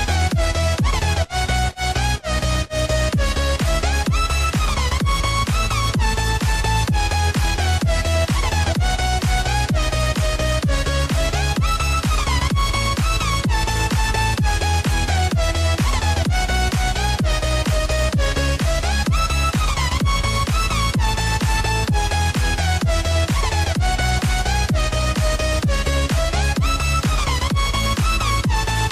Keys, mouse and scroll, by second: 1.1 click, 1.9 s, 5.1 click, 10.5 click, 14.4 click, 15.1 click, 15.6-18.5 drag, 20.7-21.4 scroll down 2, 21.4 click, 22.1-23.2 scroll down 2, 23.2 click, 24.1 click, 24.9 s, 27.9 click.